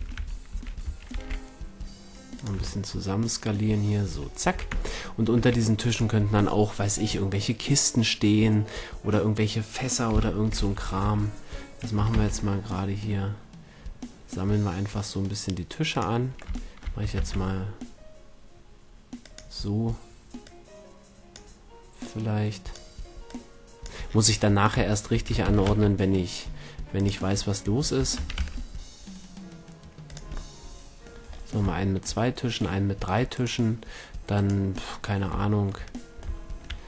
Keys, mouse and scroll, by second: 0.0 a, 0.2 a, 0.5 s, 2.5-3.8 drag, 2.6 a, 4.1 a, 4.5 a, 4.7 Tab, 5.4 a, 10.1 KP_7, 10.7 a, 11.0 a, 12.1 shift+d, 16.0-18.4 drag, 17.2 shift+d, 19.3-24.9 drag, 24.9-25.4 middle drag, 25.4 shift+d, 27.1-29.0 drag, 28.2 shift+d, 30.1-31.6 drag, 33.3-34.4 middle drag, 34.4-36.1 right drag, 36.1-36.8 middle drag.